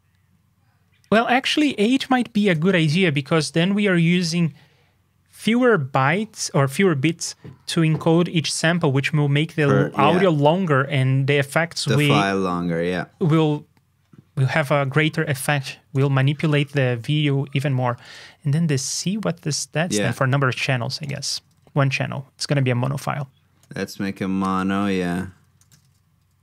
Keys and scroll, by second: 20.1 super+Tab.